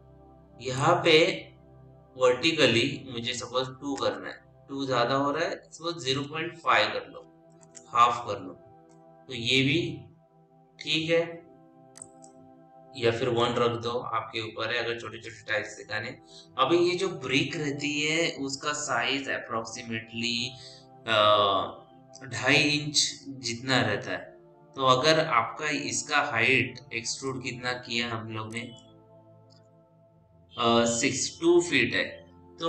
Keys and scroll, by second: 3.8 Return, 5.7 KP_0, 6.1 ., 7.1 5, 7.5 Return, 13.3 Return.